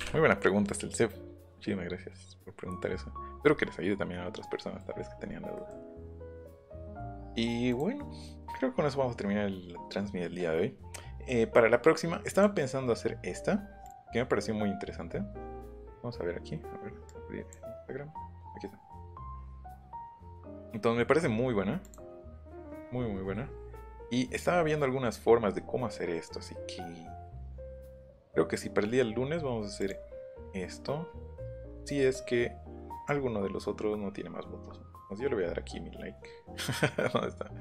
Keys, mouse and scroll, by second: 0.0 Delete, 4.2 middle click, 4.6 middle click, 5.0 middle click, 5.2 middle click, 7.7 click, 10.7-11.2 scroll up 2, 12.3 click, 13.8 click, 15.7 scroll down 1, 17.0 click, 17.7 scroll down 1, 20.0 click, 21.8 click, 29.8 click, 33.0 click, 34.0 scroll up 1, 34.4 scroll down 1, 34.6-35.1 scroll up 2.